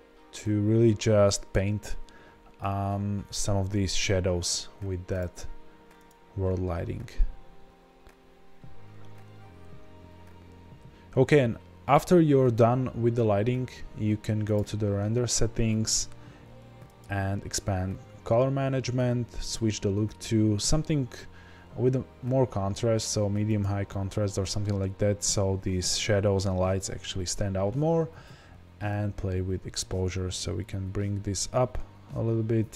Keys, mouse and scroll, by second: 5.2 click, 8.6-10.1 scroll down 1, 10.5-14.4 scroll up 1, 14.4-32.7 drag.